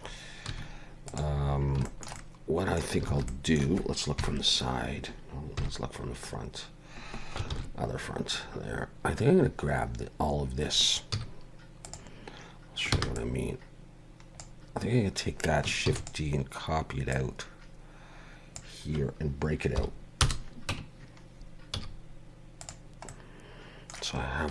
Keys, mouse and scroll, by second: 0.5 1, 1.1 click, 1.5 scroll down 4, 1.9 shift+middle click, 2.2 middle click, 3.1 alt+a, 3.3 middle click, 4.2 KP_3, 5.6 KP_1, 6.3-6.7 scroll up 3, 7.5 ctrl+KP_1, 8.4 scroll up 2, 10.4 scroll down 2, 11.1 z, 12.9 b, 15.9 shift+d, 17.1 click, 19.8 p, 20.7 Tab, 21.7 z, 23.1 middle click, 24.3 scroll down 1.